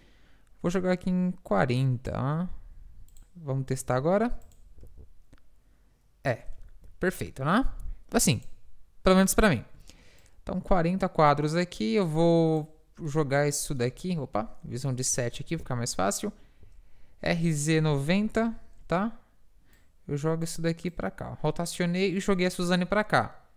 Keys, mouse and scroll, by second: 2.4 g, 4.5-6.3 drag, 4.9 alt+a, 6.7 Escape, 8.4-13.2 drag, 14.8 KP_7, 16.7 KP_7, 19.9-22.8 drag.